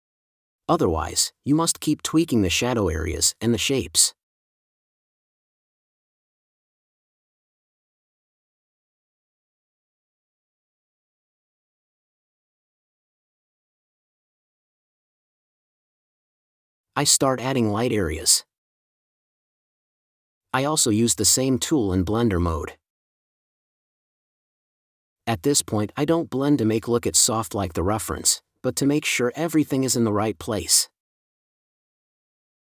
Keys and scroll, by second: 5.1 space, 8.4 space, 14.5 space, 22.5 5.